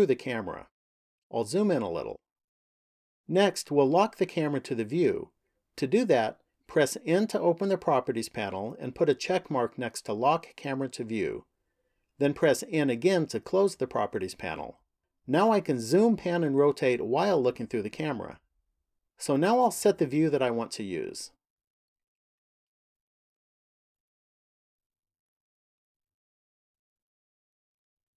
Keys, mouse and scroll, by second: 0.8-1.3 scroll up 1, 1.8-3.0 scroll up 1, 3.0-4.7 scroll up 1, 6.8 n, 9.1 click, 12.4 n, 19.4 middle click, 22.6 shift+middle click, 25.0-27.4 scroll up 7, 27.4 shift+middle click.